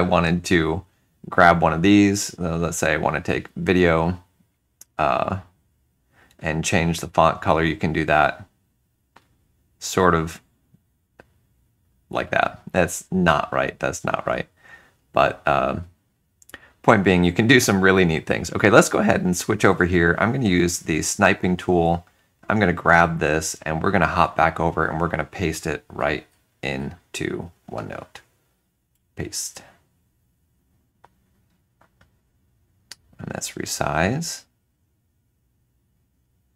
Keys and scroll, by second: 19.6 alt+Tab, 24.0 alt+Tab.